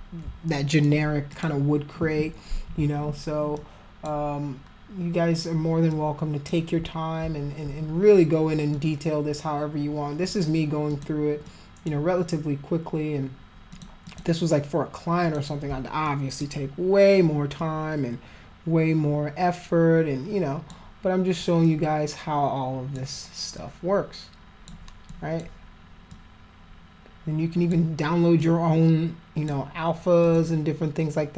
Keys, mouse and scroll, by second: 0.5 alt+middle click, 1.3 alt+click, 3.5 alt+click, 5.9 alt+click, 8.7-10.2 drag, 10.9 click, 11.5 click, 13.7 click, 14.0 click, 15.2 click, 16.1 alt+click, 17.6-20.7 alt+drag, 21.4-22.9 alt+drag, 23.5-24.7 alt+drag, 25.1 alt+click, 26.1-27.7 alt+drag, 28.4-29.5 alt+drag, 30.2 alt+click.